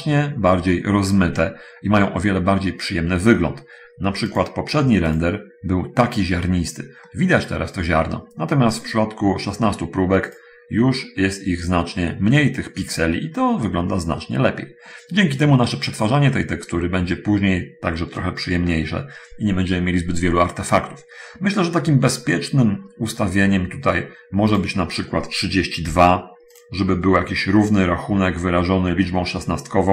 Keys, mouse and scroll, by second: 1.4 middle click, 4.6 click, 5.1 click, 7.4 middle click, 9.0 click, 10.5 click, 11.0-12.0 scroll up 1, 13.3-13.6 scroll up 1, 15.2 middle click, 22.6-23.0 scroll down 1, 26.1 3, 26.1 2, 26.9 click.